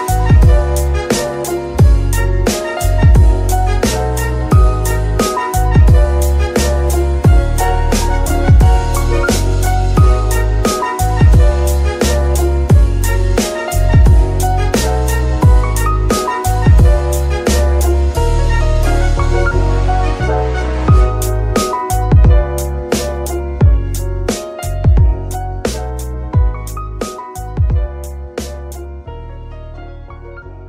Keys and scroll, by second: 0.0-1.9 typing, 2.9 w, 3.5 Return, 4.5 F2, 5.9 BackSpace, 6.0 s, 6.9 Return, 10.8 g, 11.0 Escape, 14.3 a, 18.3 Tab, 19.1 Tab, 19.8 Tab, 21.5 shift+s, 24.0 Tab.